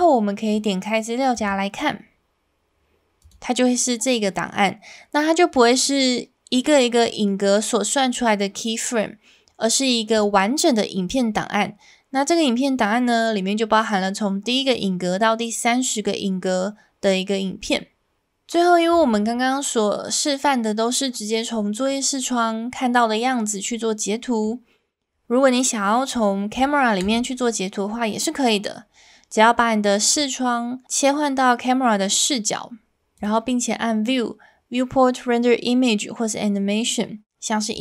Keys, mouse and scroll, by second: 1.4 click, 21.9-24.4 middle drag, 27.0 KP_0, 33.3-37.8 drag.